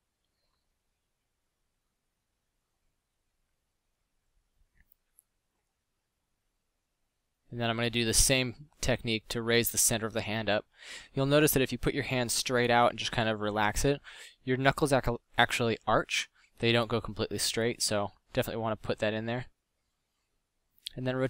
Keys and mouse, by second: 1.1 middle click, 3.0 a, 5.7 ctrl+z, 6.1 o, 6.3 o, 6.8 o, 8.8 middle click, 10.2-12.8 typing, 15.8 r, 19.4 r.